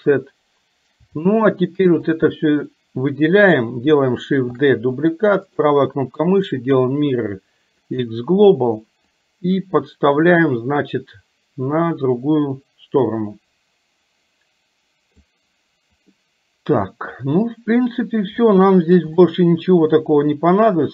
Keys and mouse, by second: 1.4 shift+middle click, 2.1 click, 4.6 shift+d, 5.6-8.1 right drag, 9.1-15.4 drag, 16.2 middle click, 18.5 shift+middle click, 19.1-20.5 middle drag.